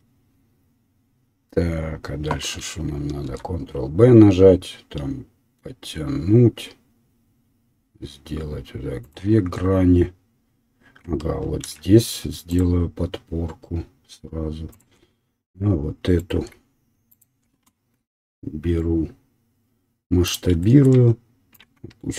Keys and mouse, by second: 3.2 ctrl+b, 4.0-16.2 middle drag, 11.6 ctrl+r, 16.2 alt+right click, 16.3 alt+middle click, 17.1 alt+click, 17.2-21.7 alt+middle drag, 18.1 s, 21.7 ctrl+click.